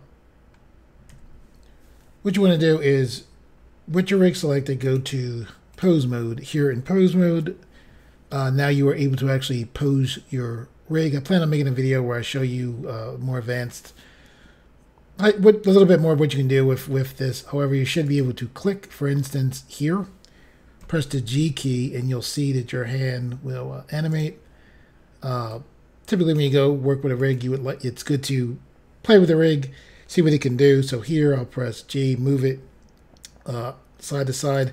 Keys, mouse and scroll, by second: 0.4 scroll up 1, 1.1 n, 4.8 click, 5.7 click, 18.0 click, 19.2 scroll up 2, 20.8 g, 24.1 right click, 25.5 click, 27.2 click, 31.0 g, 34.5 right click.